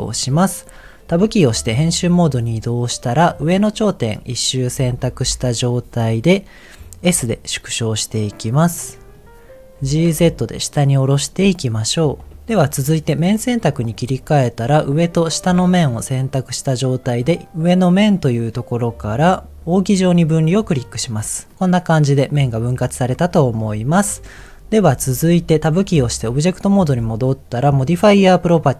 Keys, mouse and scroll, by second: 1.3 Tab, 1.8 middle click, 2.8 click, 3.4-4.7 middle drag, 5.2 KP_1, 7.0 s, 9.1 click, 9.8 g, 10.0 z, 11.2 click, 11.4 middle click, 12.1 scroll up 1, 12.3 g, 13.0 click, 13.4 middle click, 13.8 click, 14.3 middle click, 15.0 shift+click, 15.4 middle click, 17.8-20.7 drag, 21.5 middle click, 22.4 middle click, 25.8 Tab, 27.7 click.